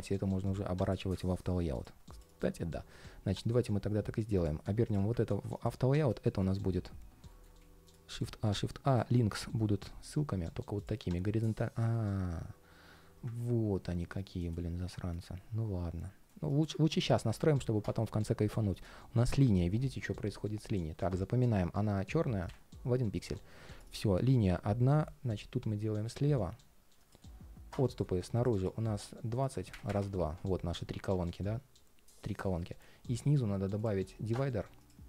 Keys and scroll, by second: 6.1 alt+i, 7.0 alt+i, 11.5 ctrl+shift+4, 30.8 ctrl+shift+4.